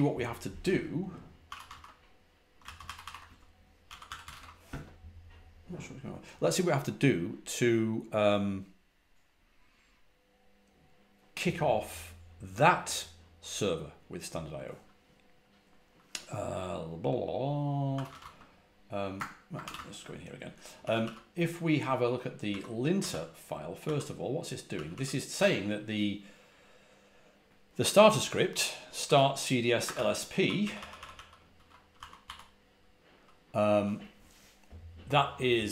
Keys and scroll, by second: 1.1-2.0 typing, 2.5 ctrl+c, 2.7 ctrl+c, 2.9 ctrl+c, 3.1 Return, 3.5-5.6 typing, 17.6-20.9 typing, 22.4-24.8 typing, 28.9-32.6 typing.